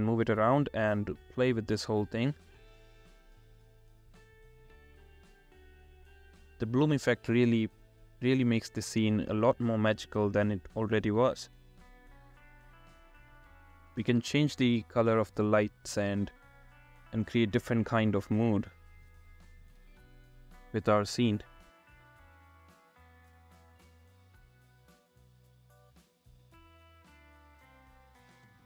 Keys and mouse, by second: 3.2 r, 4.4 z, 5.2 r, 5.6 z, 7.8 r, 7.8 z, 11.9-12.8 drag, 15.1 click, 15.4 r, 15.4 z, 20.4-20.7 drag, 25.0-26.3 drag.